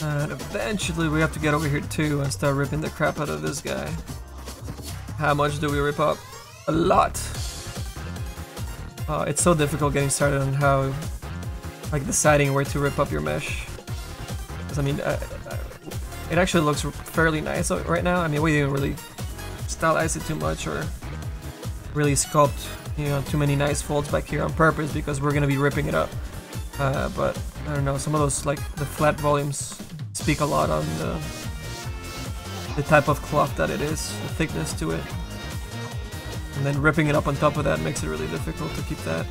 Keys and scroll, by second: 1.8 s, 2.3 s, 10.5 s, 12.8 s, 13.2 s, 37.8 s, 38.2 s.